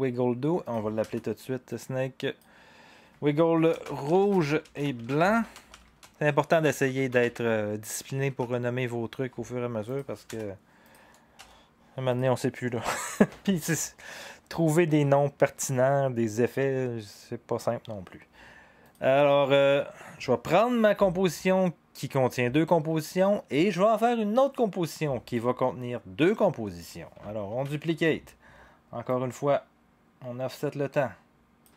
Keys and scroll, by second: 1.0 Return, 3.6-7.7 typing, 8.3 Return, 10.2 Return, 11.4 BackSpace, 27.4 ctrl+d.